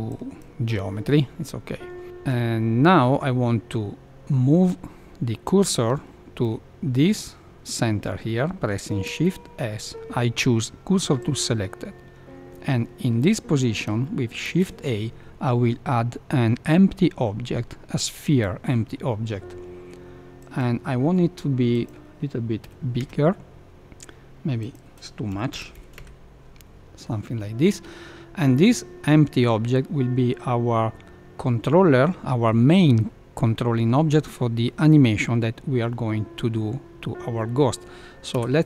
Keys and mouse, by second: 0.0 click, 9.0 shift+s, 14.4 shift+a, 20.3 click, 21.7-23.7 drag, 24.7-26.9 drag, 38.2 F2.